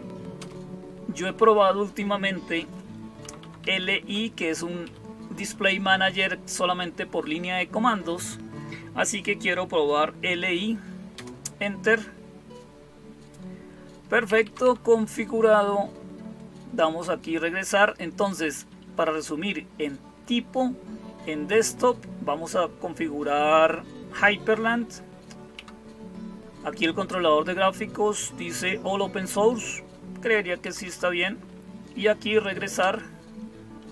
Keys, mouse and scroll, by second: 0.2 Return, 3.1 Down, 3.2 Down, 3.4 Down, 3.7 Down, 3.8 Down, 4.7 Up, 11.0 Return, 14.1 Down, 14.3 Down, 14.4 Down, 18.0 Up, 18.2 Up, 18.4 Up, 25.4 Down, 30.5 Down, 30.7 Down, 32.6 Return.